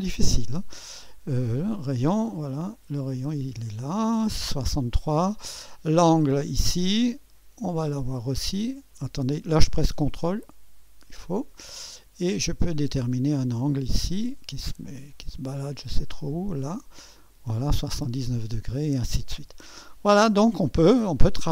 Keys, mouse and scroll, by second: 0.0 click, 1.6 click, 3.1-4.3 drag, 6.6 click, 9.6 ⌨, 11.2-13.4 drag, 16.3-17.4 drag.